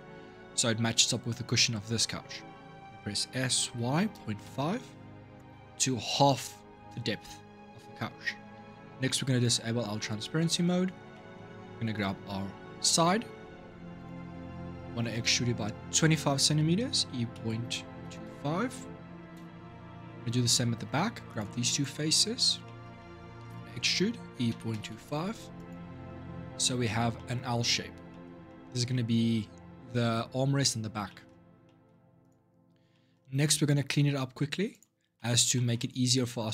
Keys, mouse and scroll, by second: 3.0 s, 9.2 click, 10.1 middle click, 10.6-10.9 scroll up 3, 10.9 shift+middle click, 11.3-11.7 scroll up 1, 11.7 click, 13.7 click, 14.1 shift+middle click, 14.5 scroll up 5, 14.9-16.7 shift+middle drag, 16.7 e, 20.0-21.1 middle drag, 21.1 click, 21.5 shift+click, 21.9-23.8 shift+middle drag, 23.8 e, 25.8 middle click, 26.2-26.6 scroll down 5, 26.6-31.2 shift+middle drag, 31.2 scroll up 2, 31.4 middle click, 31.6-32.0 scroll down 1, 32.0 click, 32.7 middle click, 33.1-34.5 scroll up 3, 34.5 click, 34.9 middle click, 35.7-36.4 scroll up 3, 36.4 click.